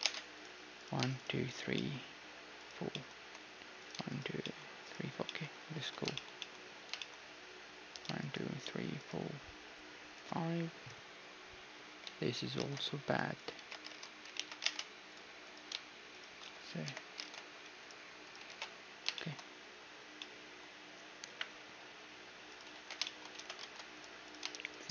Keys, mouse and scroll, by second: 0.0 ctrl+Tab, 1.7-6.7 drag, 2.9-7.1 middle drag, 5.8 a, 7.9-12.1 right drag, 12.1 a, 12.6 ctrl+Tab, 13.4-14.6 right drag, 13.6 ctrl+x, 13.9 ctrl+Tab, 14.4 ctrl+z, 14.6 ctrl+Tab, 14.6-17.9 drag, 16.9 j, 17.2 ctrl+Tab, 18.2-20.2 right drag, 18.5 ctrl+x, 18.9-22.0 middle drag, 21.3 KP_1, 22.5 right click, 22.8 ctrl+x, 23.4 ctrl+z, 23.6 ctrl+Tab, 24.2-24.9 right drag.